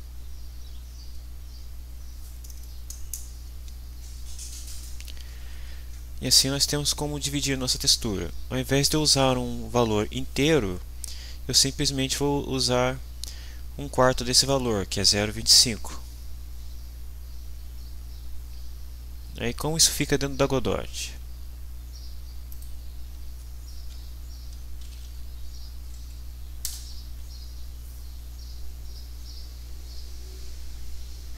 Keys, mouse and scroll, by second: 1.8 click, 22.5 click, 24.5-25.5 typing, 26.1 Down, 26.6 Return, 30.2 click, 30.5 click, 30.8 click, 31.1 p, 31.2 Down.